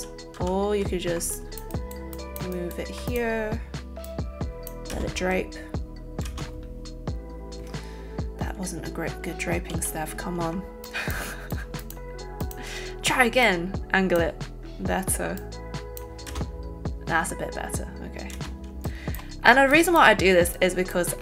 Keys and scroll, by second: 0.3 ctrl+z, 4.9 space, 9.7 ctrl+z, 10.5 ctrl+alt+z, 16.3 space, 18.4 space.